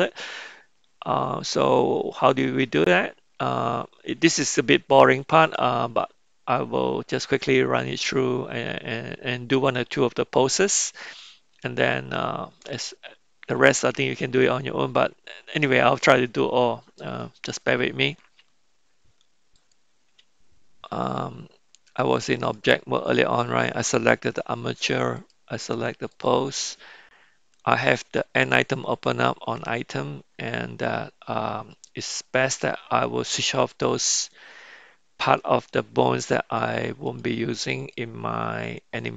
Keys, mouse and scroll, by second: 18.9 Tab, 19.5 click, 20.3 Tab, 21.9-22.7 drag, 25.1-26.4 drag, 33.9 click, 35.2 click, 37.1 drag, 37.8 click, 38.6 drag.